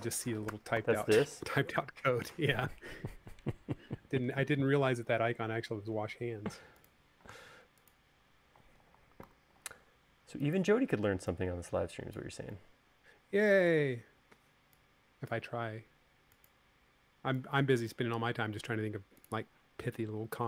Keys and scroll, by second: 6.1 u, 9.4 v.